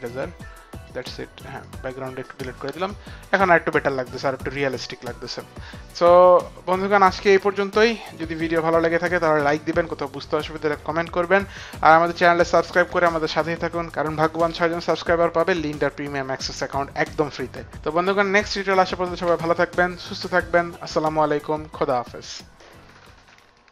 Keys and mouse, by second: 0.0-1.8 typing, 0.3 click, 1.8 click, 2.3 click, 6.6 click.